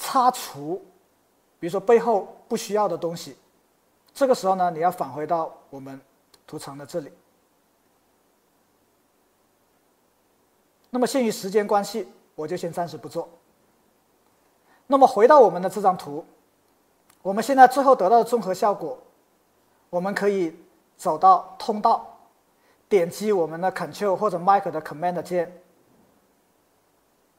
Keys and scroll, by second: 1.0 x.